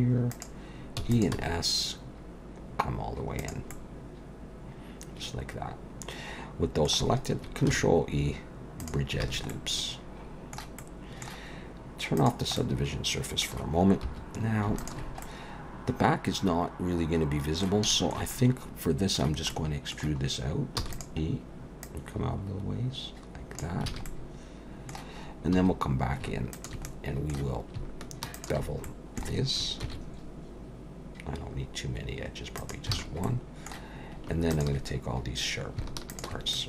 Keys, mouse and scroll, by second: 1.0 e, 1.3 s, 3.7 middle click, 7.7 ctrl+e, 9.2 alt+a, 9.5 middle click, 10.8 middle click, 12.2 click, 12.6 middle click, 14.0 3, 14.8 alt+shift+click, 15.2 middle click, 17.9 shift+middle click, 18.3 middle click, 19.5 middle click, 20.8 e, 21.8 click, 23.9 alt+a, 24.1 middle click, 25.6 2, 26.5 alt+shift+click, 26.9 middle click, 28.4 alt+shift+click, 28.9 middle click, 29.8 ctrl+b, 32.9 alt+a, 33.2 middle click, 34.5 alt+shift+click, 36.1 alt+shift+click, 36.5 middle click.